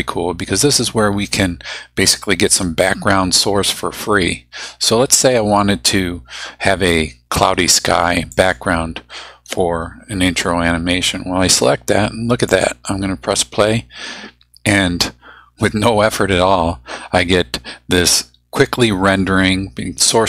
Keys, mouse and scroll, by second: 8.3 click, 12.5 click.